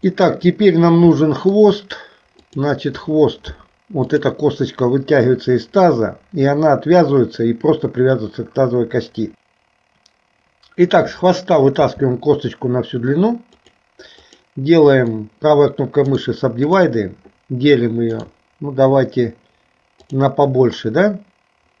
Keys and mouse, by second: 0.2 shift+middle click, 1.3 shift+middle click, 11.9 e, 16.1 right click, 18.3-20.3 right drag.